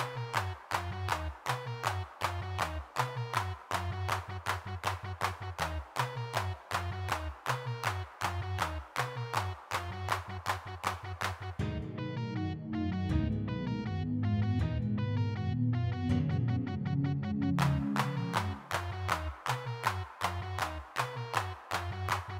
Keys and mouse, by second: 0.3 click, 0.4 middle click, 0.8 middle click, 1.3 g, 1.3 f, 2.1 f, 4.1 click, 4.1 middle click, 6.5 middle click, 7.6 middle click, 8.1 middle click, 8.1 click, 8.9 middle click, 11.2 middle click, 11.9-14.4 drag, 13.0 middle click, 14.4 ctrl+z, 14.7 ctrl+z, 15.0 click, 16.0 middle click, 16.2-17.2 middle drag, 17.2 3, 17.4 f, 17.7 click, 18.5 middle click, 20.9 middle click, 21.0-22.1 drag.